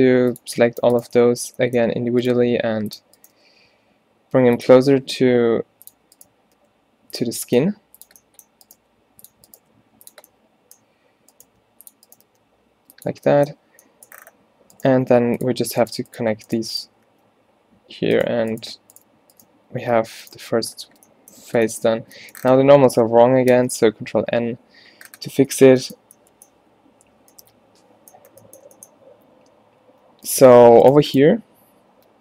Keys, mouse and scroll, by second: 0.0 g, 3.5 g, 5.2 g, 6.6 g, 7.7 g, 8.8 g, 9.7 g, 11.9 g, 12.3 g, 15.6 g, 17.1 f, 19.9 shift+f, 20.4 f, 21.0 Tab, 21.5 Tab, 22.0 a, 22.1 a, 23.6 ctrl+n, 26.8 a, 29.9 Tab, 32.0 Tab.